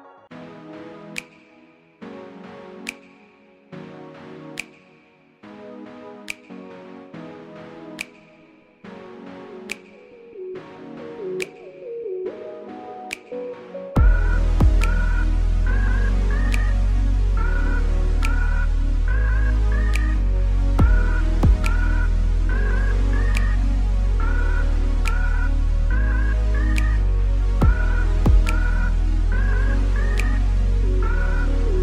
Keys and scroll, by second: 0.9 Tab, 1.8 ctrl+z, 5.8 Page_Up, 11.1 KP_7, 11.5 g, 27.5 a, 29.9 z.